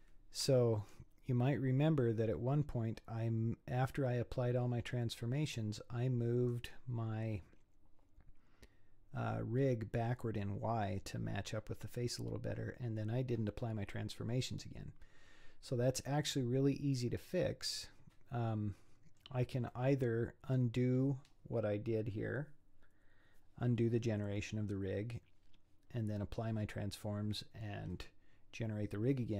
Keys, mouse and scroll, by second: 0.8-3.8 middle drag, 3.8-4.8 scroll down 3, 4.8-8.1 scroll up 3, 8.1 scroll up 1, 16.1-19.2 middle drag, 19.7-22.9 middle drag.